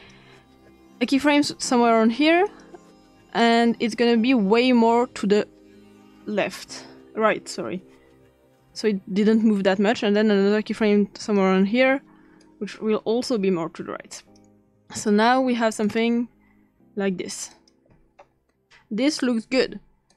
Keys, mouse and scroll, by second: 0.0 click, 2.5 click, 5.3-8.6 drag, 10.0 click, 11.2 click, 12.4-17.4 drag, 17.6-19.2 drag, 20.1 click.